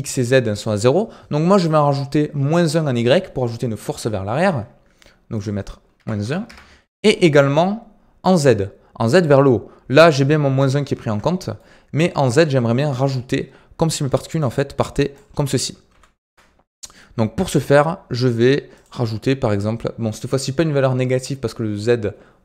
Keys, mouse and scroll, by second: 5.3-8.3 drag, 9.1 space, 10.4 space, 11.2-13.9 shift+middle drag, 13.9 d, 14.1-14.4 drag, 14.4 d, 14.7 click, 15.1 d, 15.8 ctrl+z, 16.2 ctrl+z, 18.7-21.8 drag.